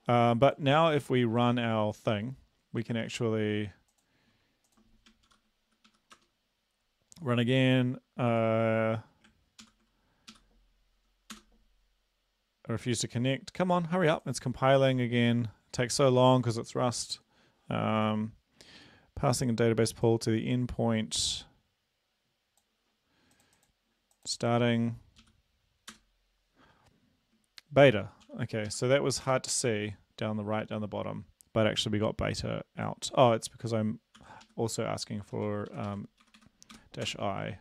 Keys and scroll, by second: 2.9 ctrl+`, 5.3 ctrl+c, 5.3 ctrl+v, 5.9 Up, 6.1 Return, 9.7 ctrl+l, 10.3 Up, 11.3 Return, 25.2 Up, 25.9 Return, 28.2 ctrl+l, 28.7 Up, 29.3 Return, 34.2 ctrl+l, 34.4 Up, 35.3 Home, 35.7 Right, 36.2 Delete, 36.4 Delete, 36.7 Delete, 37.1 Return.